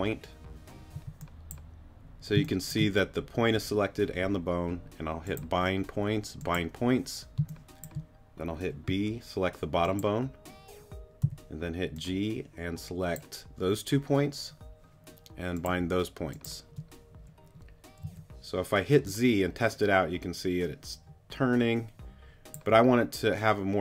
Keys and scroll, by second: 0.9 g, 2.3 space, 7.4 space, 8.9 b, 11.2 g, 18.0 z.